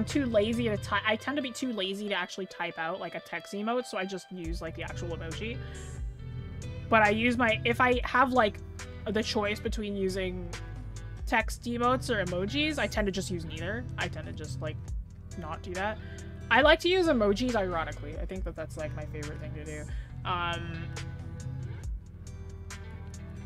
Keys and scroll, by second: 17.5-18.0 scroll down 1, 18.0-18.6 scroll up 1, 18.6-19.6 scroll down 1, 19.6-21.6 scroll up 1.